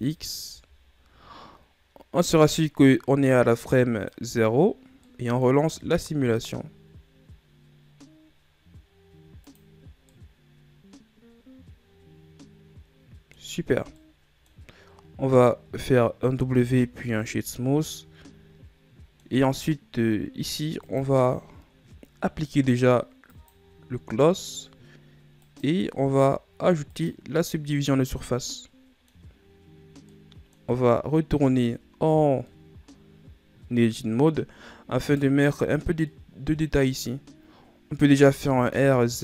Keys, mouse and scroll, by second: 1.0 Tab, 4.1 click, 5.4 scroll down 2, 5.6-7.0 middle drag, 7.0 click, 10.7-13.7 middle drag, 14.6-15.3 middle drag, 15.3-17.0 scroll up 1, 17.0 w, 18.4-21.4 middle drag, 21.4 click, 23.9-28.8 drag, 28.8-31.3 middle drag, 31.3-32.0 scroll up 2, 32.0 Tab, 33.1-35.8 middle drag, 35.8 right click, 36.7-38.9 middle drag, 38.9 r.